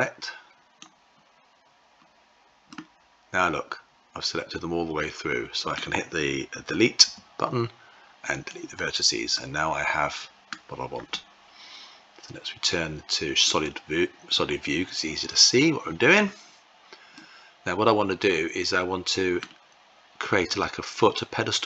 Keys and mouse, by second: 2.4-5.5 middle drag, 6.8 Delete, 9.1-10.3 middle drag, 13.8-17.0 drag, 17.0-19.2 middle drag.